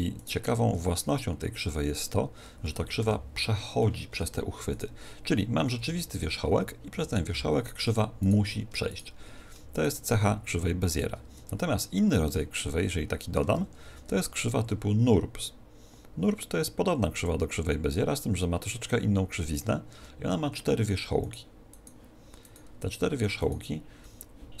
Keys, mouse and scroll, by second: 0.8 r, 1.7-3.6 drag, 3.0 o, 3.8-5.7 middle drag, 5.7-6.7 right drag, 5.7 r, 7.3 g, 7.8-9.7 drag, 8.2-12.7 right drag, 11.3 Tab, 11.9 click, 11.9-13.9 middle drag, 13.5 shift+a, 19.9 Tab, 21.2-24.6 right drag.